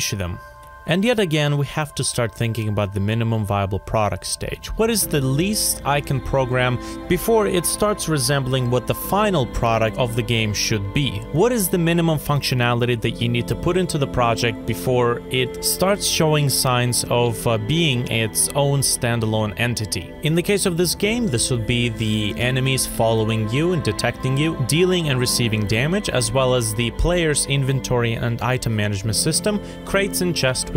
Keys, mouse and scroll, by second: 0.5 F5, 8.3 alt+click, 8.5 ctrl+d, 9.9 F5.